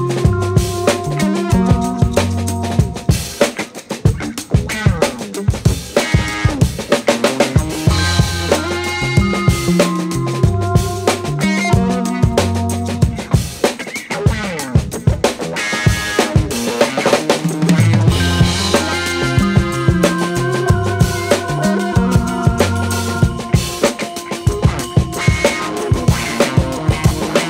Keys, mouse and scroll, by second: 15.9 click, 16.7 scroll up 1, 22.2 click, 25.9 click.